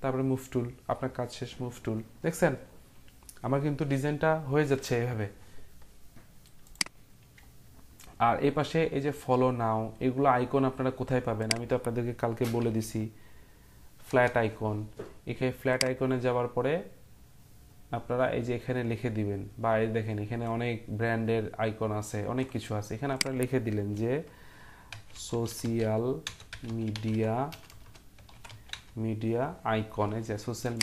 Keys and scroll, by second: 12.2-13.3 typing, 14.1 Return, 16.7-17.4 typing, 24.7-29.0 typing.